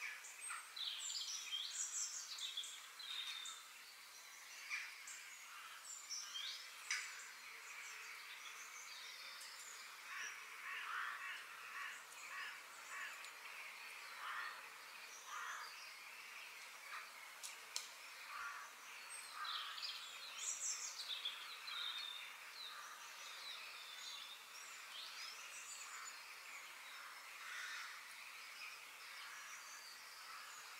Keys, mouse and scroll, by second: 1.4 g, 3.8 g, 5.5 middle click, 10.6-12.5 middle drag, 14.4-16.4 middle drag, 21.2-22.4 middle drag, 22.4 click, 23.0 g, 24.2 middle click, 24.9-25.5 scroll up 1, 25.5-26.7 shift+middle drag, 26.7 g, 28.2 g, 30.6-30.7 middle drag.